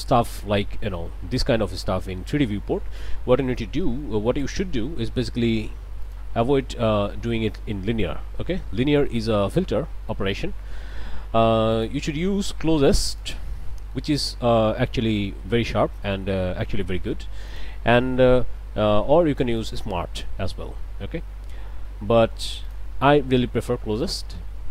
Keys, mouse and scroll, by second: 2.0 scroll down 2, 2.5 scroll up 2, 4.4 click, 6.0 click, 7.3 middle click, 8.8 middle click, 11.7 click, 13.1 click, 13.9 click, 17.5 click, 19.6 click, 21.1 middle click, 21.3 middle click, 22.7 click, 24.0 click.